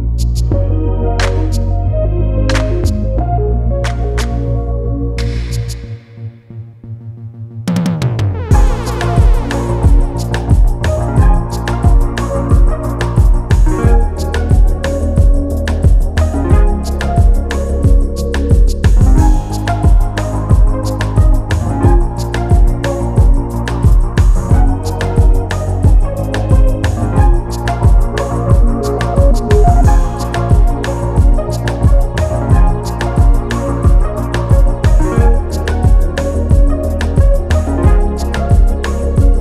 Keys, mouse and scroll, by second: 4.7 r, 5.7 click, 5.7 t, 8.2 scroll up 1, 8.5-8.9 scroll down 1, 8.9 click, 12.3 click, 14.5 scroll down 1, 15.1 click, 16.4 scroll up 1, 17.5 click, 20.9 g, 22.0 click, 29.2 click, 29.5 click, 31.3 click, 32.2 scroll down 1, 32.9 click, 33.7 ctrl+s, 34.7 scroll up 1, 36.7 click.